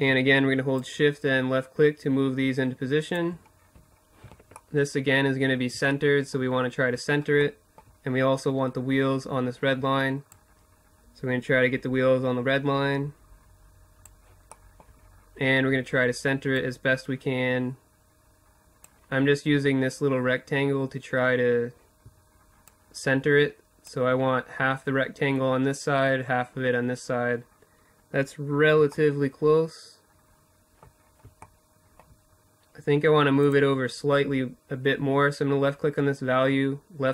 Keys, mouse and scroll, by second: 2.0-7.9 middle drag, 8.7-10.9 drag, 14.9-16.8 drag, 21.1-22.9 drag, 27.5-28.9 middle drag, 29.5-31.8 middle drag, 31.8-33.8 drag.